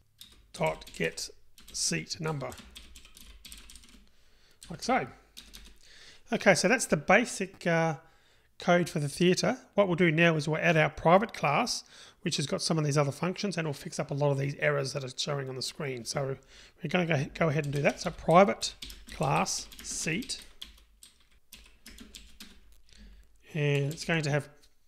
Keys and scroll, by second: 0.3 Return.